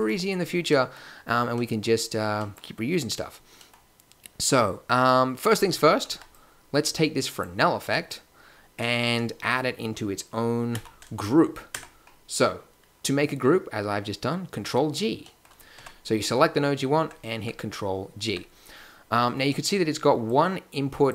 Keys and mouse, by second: 5.4 a, 6.0 b, 10.7 ctrl+g, 11.7 Tab, 15.2-18.2 right drag, 15.7 Tab, 17.0 Tab, 17.3 Tab, 18.2 Tab, 20.2-21.1 drag.